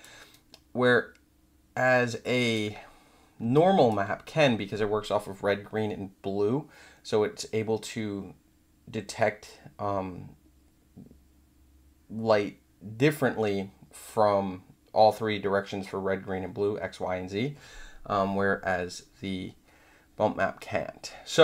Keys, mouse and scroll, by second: 0.3-2.5 alt+drag, 3.5 alt+click.